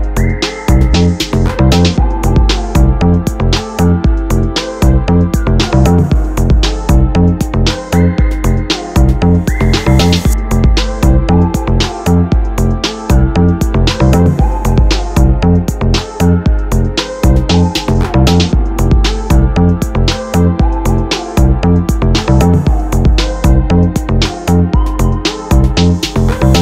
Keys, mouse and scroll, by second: 0.7 click, 1.0-2.6 middle drag, 2.6-3.6 drag, 3.6-4.7 middle drag, 4.7 scroll down 2, 5.1-5.9 drag, 8.3 ctrl+p, 10.1-10.5 middle drag, 10.5 scroll down 3, 11.7 KP_7, 12.4 KP_7, 13.1 KP_Divide, 14.2 s, 17.2 KP_7, 18.1 t, 18.9 r, 21.4 g, 23.7-25.5 middle drag, 25.5 g.